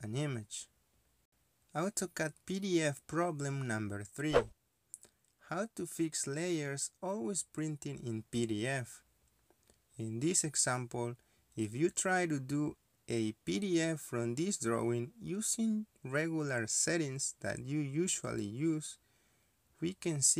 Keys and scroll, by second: 0.0 Escape, 0.2 Escape, 0.3 Escape, 1.4 ctrl+p, 15.6 Escape.